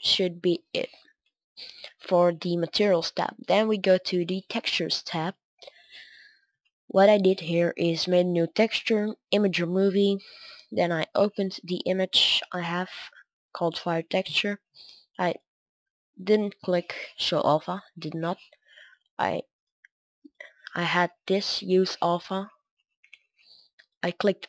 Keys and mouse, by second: 0.5 middle click, 0.7 middle click, 15.2-24.4 drag.